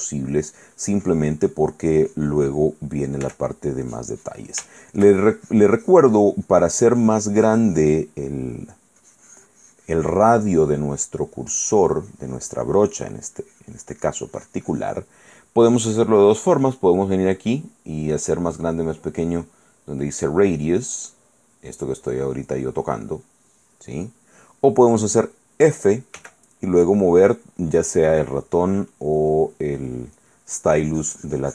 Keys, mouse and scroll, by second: 3.4 f, 3.6 click, 4.0 click, 4.9 shift+middle click, 5.7-8.7 drag, 8.7 middle click, 13.0 middle click, 13.6 click, 19.5-23.6 drag, 26.4 f, 29.4 click, 30.1 middle click, 30.6-31.5 drag.